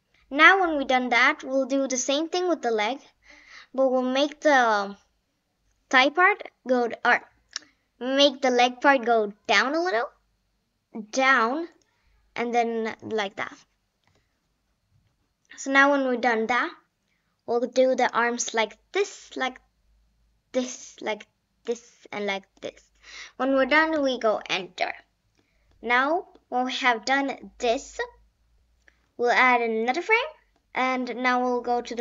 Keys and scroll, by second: 14.0 Return, 24.0 Return.